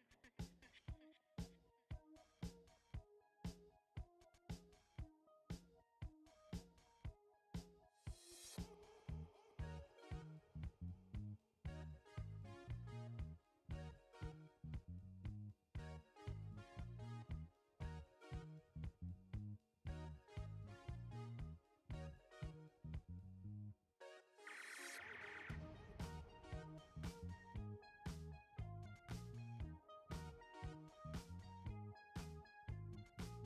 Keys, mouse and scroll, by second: 7.1-11.5 drag, 23.7 click, 26.0 click, 28.6 shift+click, 33.0 ctrl+g.